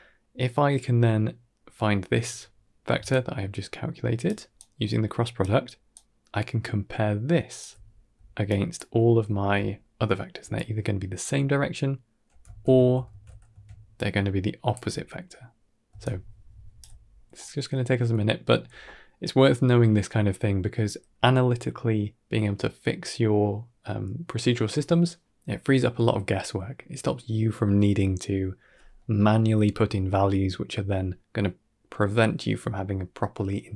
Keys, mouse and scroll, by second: 2.8 d, 3.0-4.1 right drag, 4.1-5.8 typing, 4.4 right click, 5.8 right click, 7.5-11.1 typing, 8.3 click, 10.4 click, 12.3 z, 12.9 ctrl+z, 13.5 d, 13.8 click, 14.6 d, 14.7 d, 15.9 right click, 15.9 d, 16.7 d, 16.9 scroll down 2, 17.2 middle click.